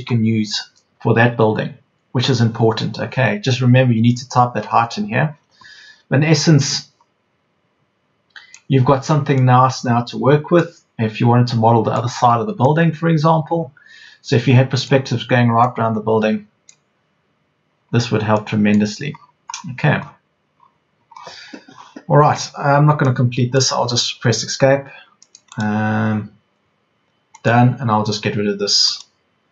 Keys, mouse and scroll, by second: 9.1 Escape, 17.9 Escape, 24.1 Escape.